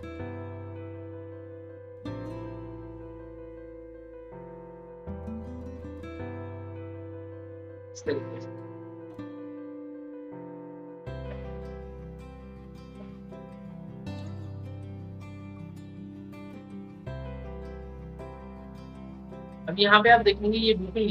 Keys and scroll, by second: 8.2 ctrl+k.